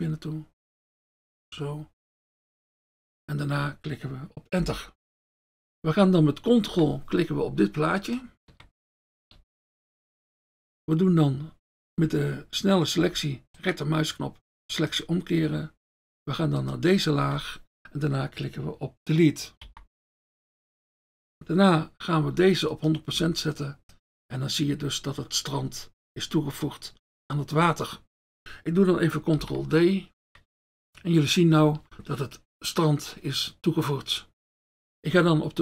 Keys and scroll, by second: 4.8 Return, 5.6 ctrl+d, 7.4 ctrl+F1, 9.4 F1, 16.7 F1, 19.7 Delete, 29.4 ctrl+d.